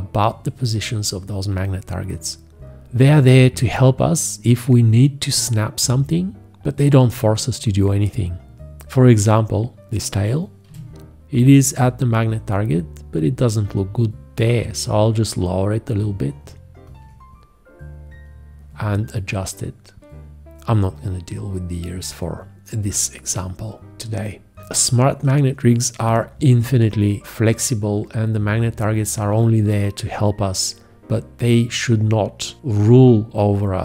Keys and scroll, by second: 2.8 F1, 10.6 g, 26.0 F1.